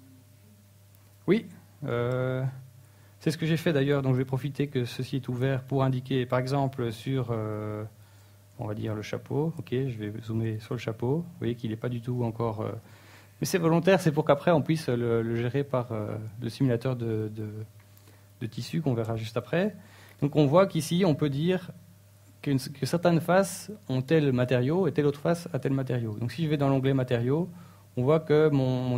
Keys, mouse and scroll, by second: 0.0-1.0 typing.